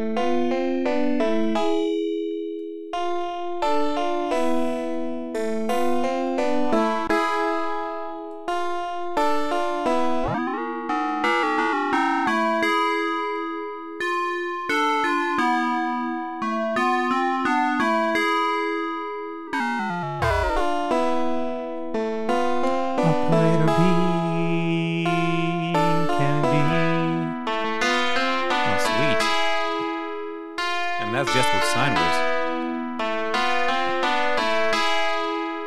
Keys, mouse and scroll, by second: 2.5 click, 4.1 click, 5.8 click, 6.5-8.5 drag, 9.0-10.0 drag, 10.1-11.2 drag, 11.4-11.9 scroll down 4, 12.2 scroll down 2, 13.3-14.3 drag, 14.5-18.7 drag, 19.4-20.2 scroll down 2, 20.2-20.7 scroll down 1, 26.4-28.8 drag.